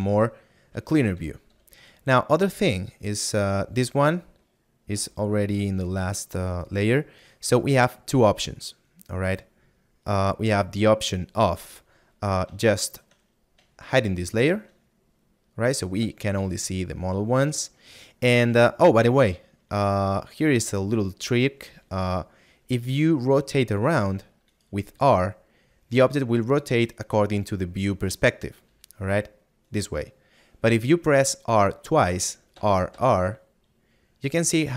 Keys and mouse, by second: 6.3 click, 7.7 middle click, 16.0 right click, 19.3 middle click, 29.6 right click.